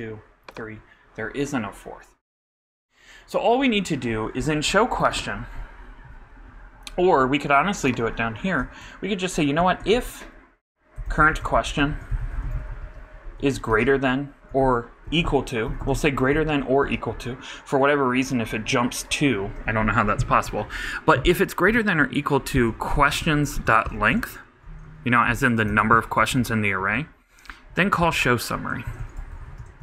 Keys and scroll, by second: 9.8 shift+f, 10.9-13.7 typing, 14.5 alt+shift+space, 14.6 alt+BackSpace, 15.0 alt+=, 15.9 shift+BackSpace, 16.0 shift+., 16.3 shift+=, 24.3-25.5 typing, 25.7 shift+Return, 28.5-29.8 typing.